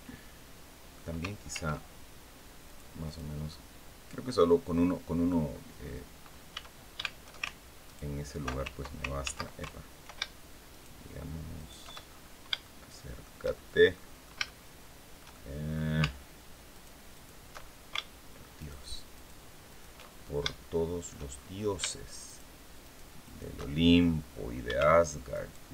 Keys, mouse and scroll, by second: 1.2 ctrl+r, 2.3 click, 2.7 click, 3.2-5.2 middle drag, 5.4-5.7 scroll up 2, 6.2 a, 7.6 ctrl+alt+right click, 8.9 ctrl+z, 10.4 alt+shift+right click, 11.3 alt+shift+right click, 11.8-12.1 alt+shift+scroll up 3, 12.3 shift+middle click, 13.6 middle click, 14.2-15.6 shift+middle drag, 16.4 alt+shift+right click, 16.8 alt+shift+right click, 17.3 alt+shift+scroll up 2, 18.3 alt+shift+right click, 18.8 alt+shift+right click, 19.4 alt+shift+right click, 19.8 alt+shift+scroll up 2, 20.1 shift+right click, 21.0-21.3 shift+scroll up 2, 21.9 alt+shift+right click, 22.5 alt+shift+right click, 22.9 alt+shift+right click, 23.6-23.9 alt+shift+scroll up 1, 25.0 alt+shift+right click, 25.5-25.7 alt+shift+scroll down 2.